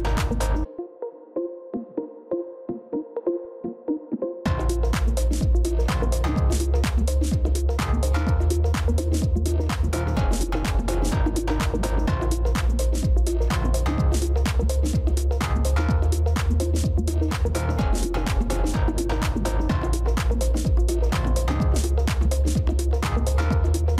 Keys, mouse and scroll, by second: 6.4 Down, 6.8 Down, 7.1 Down, 7.4 Down, 7.7 Down, 7.9 Down, 18.2-20.0 typing, 20.3 Return, 21.5 v.